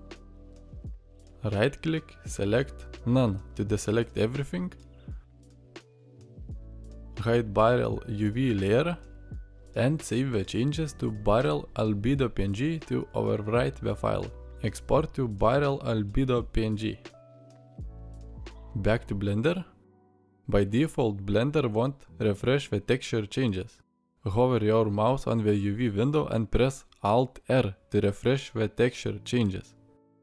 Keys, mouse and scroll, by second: 20.0-20.4 drag.